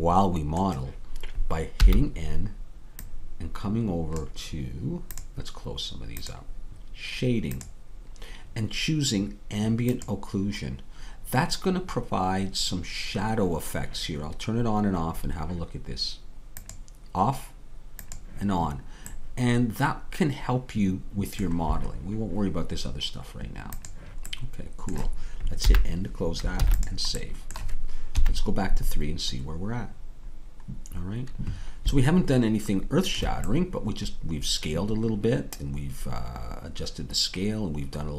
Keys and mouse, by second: 1.8 n, 5.4-22.0 drag, 25.7 n, 26.6 ctrl+s, 28.2 KP_3.